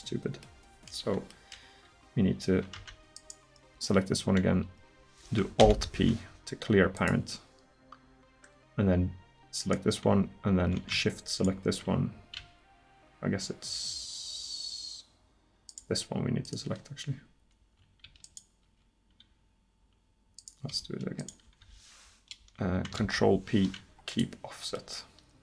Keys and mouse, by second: 2.8 Tab, 5.6 alt+p, 9.6-13.3 right drag, 15.7-20.4 right drag, 23.0 ctrl+p.